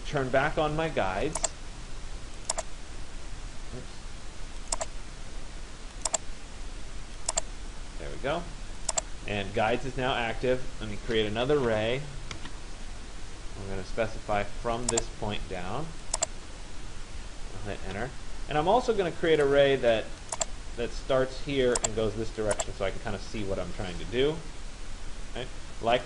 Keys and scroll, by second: 0.1 Escape, 11.0 r, 12.4 Return, 17.5 Return, 22.9 Return.